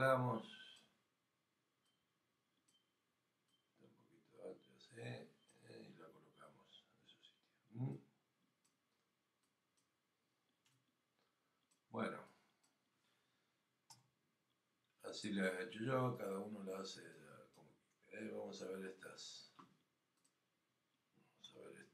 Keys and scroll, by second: 21.4 f.